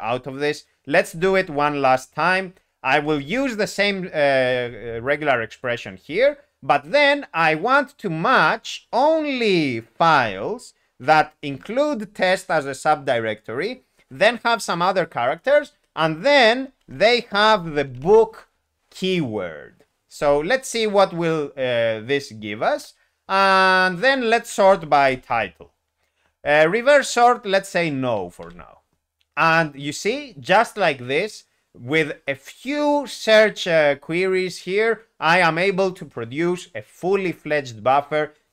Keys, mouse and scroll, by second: 1.1 alt+p, 1.8 Return, 2.9 alt+p, 4.2 ctrl+e, 10.1 ., 11.1 ., 16.8-17.9 typing, 22.7 ., 22.8 Return, 24.9 ., 25.1 ., 25.3 Tab, 28.4 n.